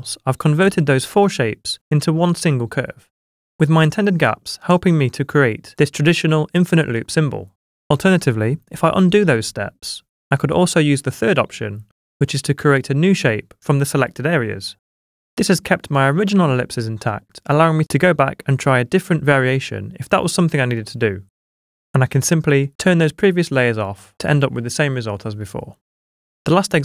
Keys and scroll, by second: 8.4 super+z, 20.9 v.